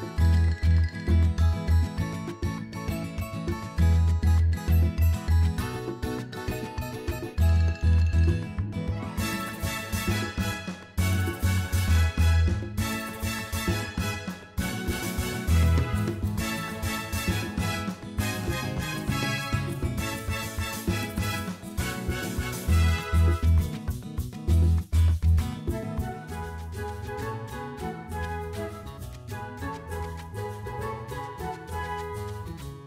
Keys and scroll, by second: 0.9 g, 2.4 Tab, 2.9 alt+a, 6.1 Tab, 7.2 3, 10.1 i, 11.8 2, 15.3 shift+s, 16.5 Tab, 16.9 shift+a, 20.0 Tab, 20.8 s, 22.5 s, 23.0 shift+z, 26.1 Tab, 26.9 g, 29.5 Tab, 30.5 s, 30.8 shift+z.